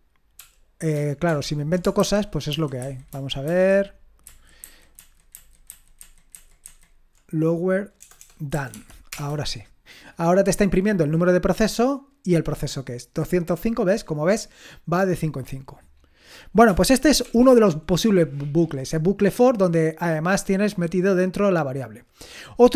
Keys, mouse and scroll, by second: 1.3 ctrl+p, 2.0 alt+b, 2.5 alt+b, 2.8 alt+b, 3.1 alt+b, 3.4 alt+b, 4.3 alt+b, 4.6 alt+b, 5.0 alt+b, 5.3 alt+b, 5.7 alt+b, 6.0 alt+b, 6.3 alt+b, 6.7 alt+b, 8.0-8.7 typing, 9.1 Return, 9.9-10.6 typing, 10.1-10.9 scroll up 1, 10.9 scroll up 1, 11.7-14.0 drag, 14.1-15.2 scroll up 1, 15.2-16.7 scroll up 1, 16.7-17.3 scroll up 1, 17.3 ctrl+l, 21.7-22.7 scroll down 1.